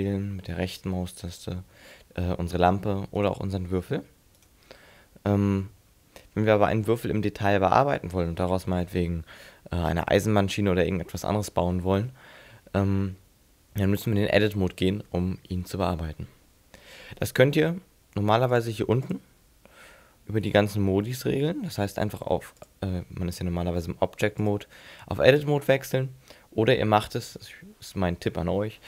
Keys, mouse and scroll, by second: 1.3 right click, 3.3 right click, 3.4 right click, 4.4 right click, 5.9-6.3 scroll down 2, 6.3-7.3 scroll up 4, 7.3 scroll up 1, 14.5 Tab, 18.5 click, 19.1 click, 24.4 click, 25.5 click.